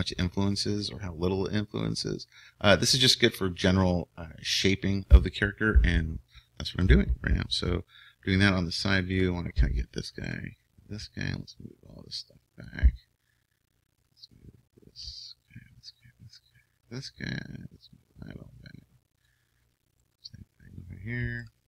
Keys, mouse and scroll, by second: 9.1-12.0 right drag, 11.4-14.1 drag, 14.1-19.3 right drag, 17.9-19.7 drag, 19.7 right click, 19.8 click, 20.0-21.6 right drag.